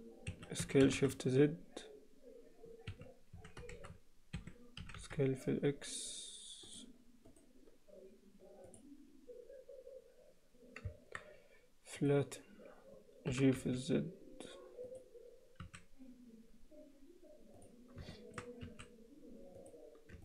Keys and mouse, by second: 1.1 s, 3.4 s, 4.9 s, 7.4-9.6 right drag, 13.3 g, 15.6 s, 18.2 shift+middle click.